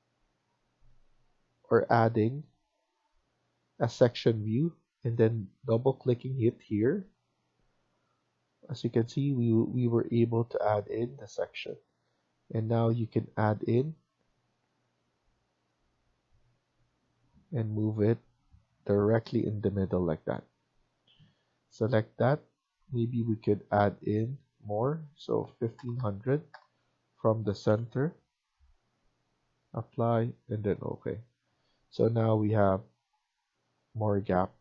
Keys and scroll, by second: 1.8 Escape, 2.1 Escape, 5.7 Escape, 6.0 Escape, 20.3 Escape, 20.5 Escape, 25.3-25.7 typing, 27.5 BackSpace, 31.5 Escape, 31.8 Escape.